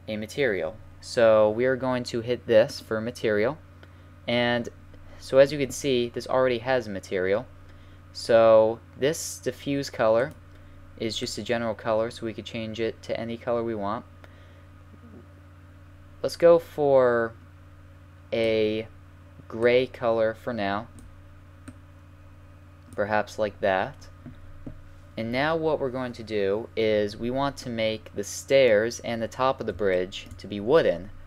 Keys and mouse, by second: 3.0-4.5 drag, 10.2-12.1 drag, 24.8-26.2 middle drag, 27.6-31.2 middle drag.